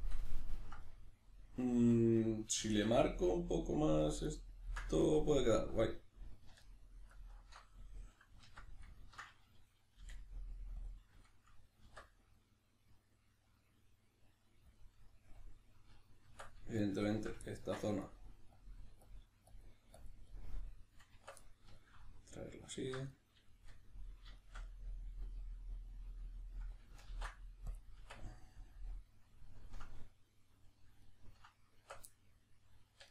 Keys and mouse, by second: 4.3 right click, 4.7 ctrl+right click, 5.8 alt+right click, 6.6 alt+shift+right click, 7.1 alt+shift+right click, 8.5 alt+q, 9.0-10.8 ctrl+middle drag, 10.0 g, 10.8 click, 11.8 alt+s, 14.8 click, 16.2 Tab, 16.8 shift+click, 17.4 ctrl+middle click, 18.0 click, 20.3 middle click, 21.1 b, 21.4-22.7 middle drag, 22.7 alt+right click, 23.1-33.1 middle drag, 27.1 ctrl+e, 28.0 Tab, 31.8 Tab, 32.9 1.